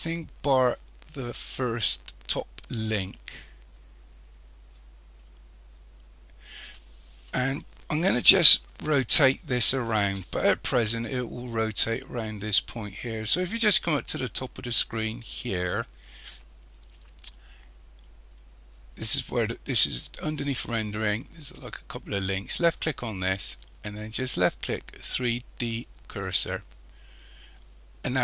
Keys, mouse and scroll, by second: 7.2-8.6 scroll up 2, 8.6-11.6 shift+middle drag, 22.6 click, 27.8-28.2 scroll down 3.